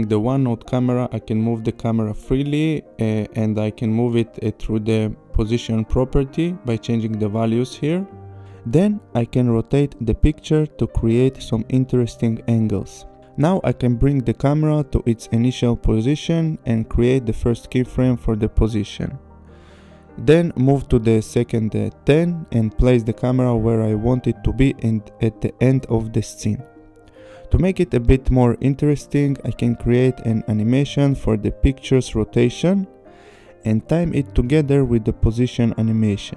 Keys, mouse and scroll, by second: 1.0 click, 6.4 click, 7.0 r, 8.1 click, 9.7 click, 11.7 click, 13.2 click, 15.1 click, 15.8 click, 16.7 click, 18.4 click, 19.5 click, 20.2 click, 23.9 click, 26.3 click, 28.7 click, 29.3 click, 30.6 click, 31.6 click, 32.4 click, 34.9 click.